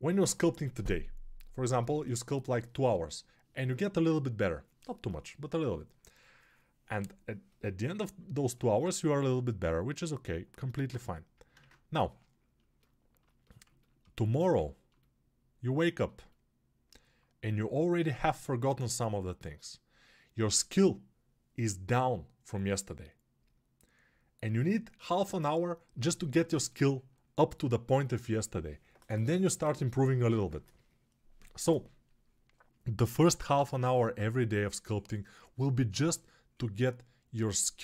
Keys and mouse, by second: 11.4 ctrl+space.